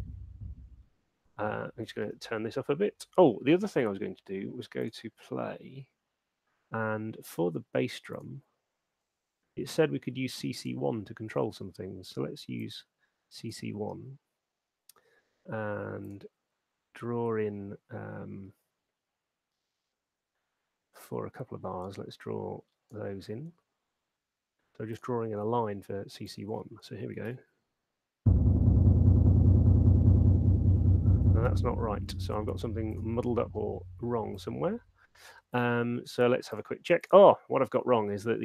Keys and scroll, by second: 1.1 space, 27.8 alt+shift+space, 31.5 space.